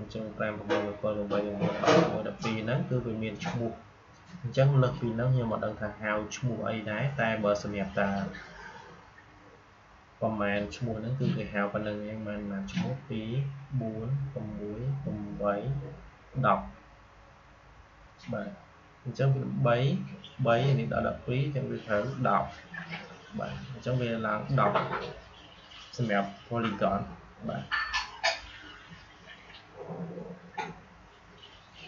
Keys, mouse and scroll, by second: 4.9-7.8 drag, 31.8 click.